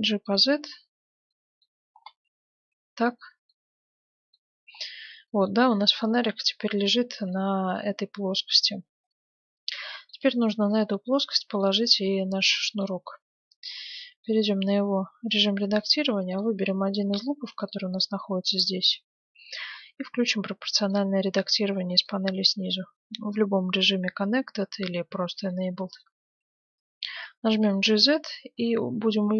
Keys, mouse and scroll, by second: 0.5-1.3 scroll down 1, 1.3-9.1 middle drag, 10.8-12.4 right drag, 11.3-13.8 middle drag, 13.2 Tab, 14.2-18.6 middle drag, 16.3-19.5 right drag, 20.8-22.8 drag, 25.5-27.3 middle drag, 27.5 g.